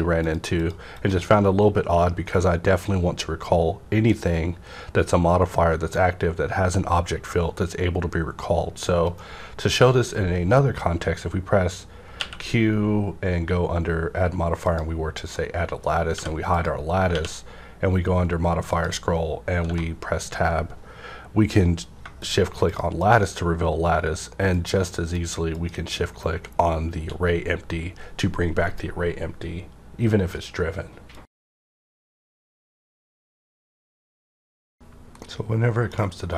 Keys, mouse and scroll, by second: 9.1 right click, 9.1 shift+click, 12.1 q, 12.2 right click, 14.6 click, 14.6 q, 15.3 middle click, 16.1 h, 16.5 click, 17.1 q, 18.7 click, 19.1 scroll up 1, 19.6 Tab, 22.0 scroll up 1, 22.0 -, 22.2 shift+click.